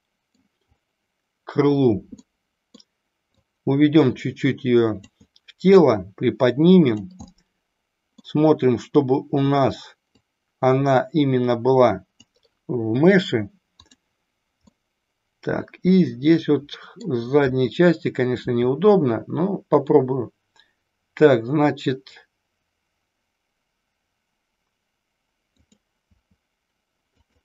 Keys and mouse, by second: 2.4 middle click, 3.5-5.1 drag, 5.9-7.0 drag, 7.3-8.3 middle drag, 10.3-12.3 drag, 13.8 click, 14.8-17.1 middle drag, 25.6 click, 27.3 click.